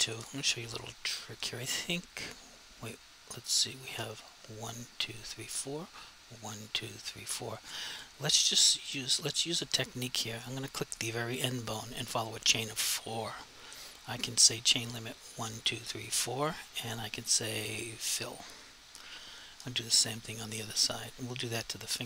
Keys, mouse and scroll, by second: 8.9 click, 10.4 click, 15.4 click, 15.6 double click, 15.9 click, 16.1 double click, 18.1 click, 21.1 click.